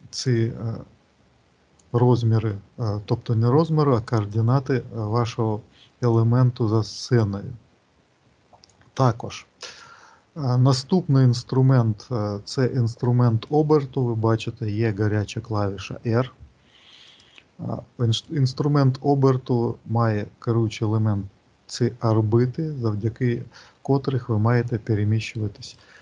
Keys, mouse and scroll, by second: 0.1 click, 3.5 click, 7.0 click, 17.0 click, 18.0 click.